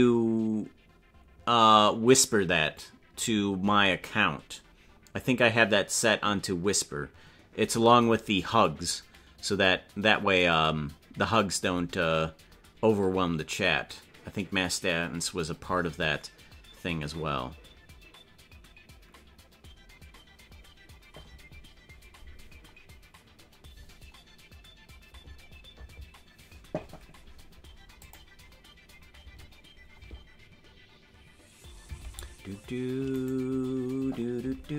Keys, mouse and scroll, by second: 32.2 ctrl+Tab.